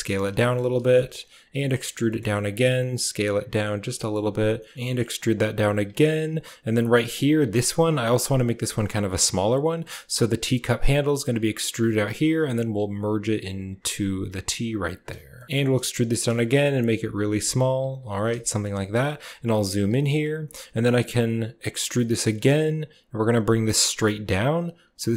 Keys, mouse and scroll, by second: 0.1 s, 0.3 shift+click, 0.6 g, 1.3 e, 2.5 s, 3.8 e, 4.7 z, 5.5 s, 6.6 g, 7.6 s, 14.0 s, 15.2-15.8 typing, 15.4 ctrl+z, 16.9 s, 17.0 g, 17.7 s, 18.3 shift+click, 18.9 shift+click, 19.4 shift+click, 19.7 s, 21.6 e.